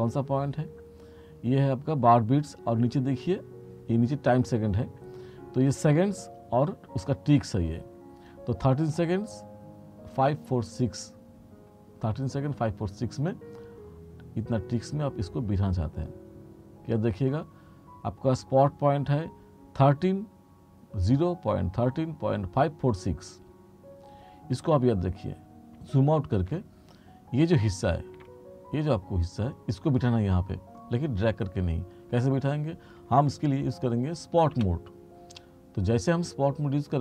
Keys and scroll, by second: 28.3 r, 34.7 F3.